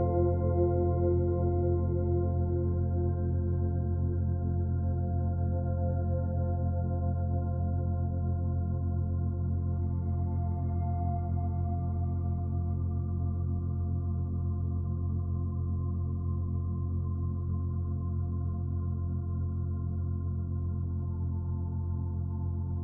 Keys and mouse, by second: 3.7 Right, 4.5 Right, 4.9 Right, 5.0 Right, 5.2 Right, 6.0 click, 7.1-8.5 drag, 8.7 d, 11.0 shift+click, 13.1 g, 13.3 1, 13.7 click, 15.0 typing, 16.0 Escape, 17.3 click, 18.0 Delete, 18.5-19.8 drag, 21.5 shift+d, 22.7-22.8 shift+drag.